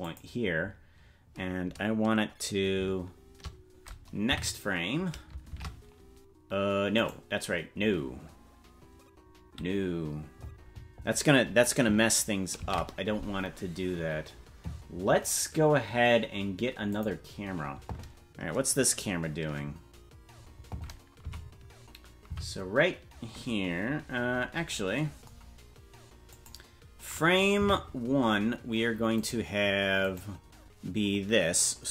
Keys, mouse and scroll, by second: 4.3 Right, 5.5 shift+`, 15.2 ctrl+s, 16.9 click, 21.3 Left, 22.3 Right, 24.1-24.9 scroll down 1, 24.9-26.3 scroll down 14, 26.3 click, 27.7 Right, 29.3 right click, 31.4 right click.